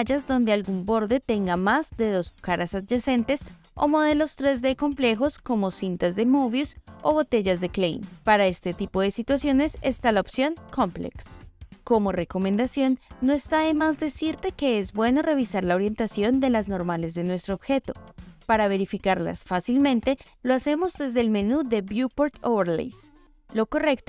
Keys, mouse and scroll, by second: 0.2 click, 0.6 click, 2.2-2.6 drag, 3.0 middle click, 3.8 click, 4.6-6.0 middle drag, 7.1-8.1 drag, 9.2-9.7 drag, 13.4-18.0 middle drag, 20.0-23.4 drag.